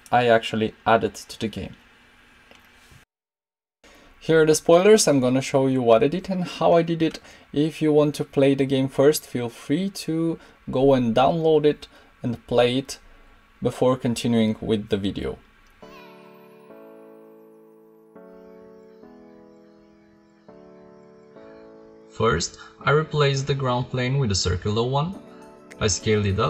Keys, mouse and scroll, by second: 19.2-20.5 drag, 21.1 KP_0, 22.2 x, 22.7 shift+a, 24.2 s, 25.2 click, 25.4 middle click, 26.2 Tab.